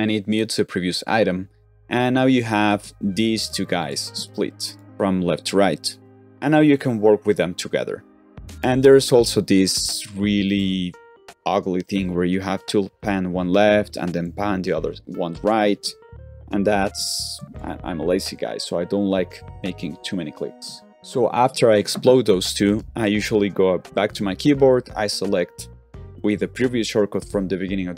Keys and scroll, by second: 16.9 super+z, 17.3 super+z, 24.0 shift+=.